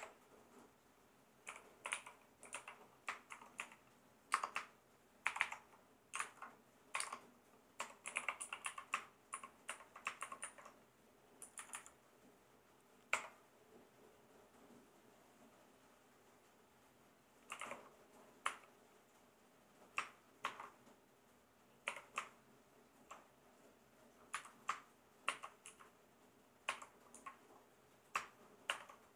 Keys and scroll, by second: 1.2-5.3 typing, 6.2 alt+Left, 6.9-10.4 typing, 11.4 Left, 13.1 \, 17.3-18.4 typing, 20.4 shift+-, 21.9 l, 24.3 Left, 25.3 shift+[, 25.7 Right, 26.7 =, 27.1 1, 28.7 shift+].